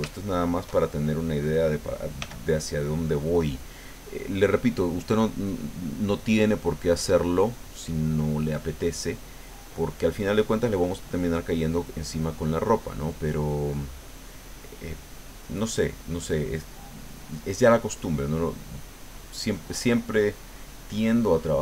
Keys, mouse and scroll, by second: 0.3-1.4 shift+middle drag, 2.2 f, 2.8 click, 3.3-7.9 drag, 8.4-11.3 drag, 11.5 click, 12.1 middle click, 13.2 middle click, 14.4-16.6 drag, 16.7 middle click, 17.7-19.8 drag, 19.8 middle click, 20.8 click.